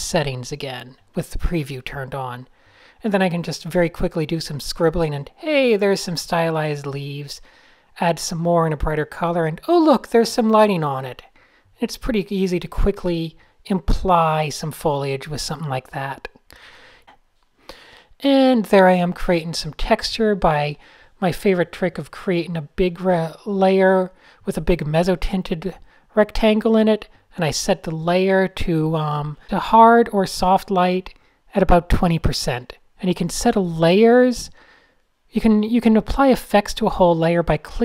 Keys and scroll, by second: 0.5 super+z, 0.6 super+x, 1.0 super+n, 4.5 n, 4.8 super+z, 5.2 super+z, 5.3 d, 6.6 super+-, 6.9 super+a, 7.4 alt+shift+super+{, 7.5 alt+shift+super+{, 8.0 a, 8.3 alt+shift+super+{, 8.4 alt+shift+super+{, 8.4 alt+shift+super+n, 10.6 a, 10.8 alt+shift+super+}, 11.1 alt+super+n, 12.0 d, 15.5-16.7 typing, 16.6 fn+F7, 17.2 Tab, 18.1 super+a, 18.2 shift+x, 20.0 alt+super+m, 20.4 Return, 22.4-23.3 typing, 24.4 alt+super+g, 28.9 super+z, 29.0 super+x, 33.2 n, 33.6 alt+shift+super+r, 35.4 Tab, 35.6 typing, 37.4 super+space, 37.5 Tab.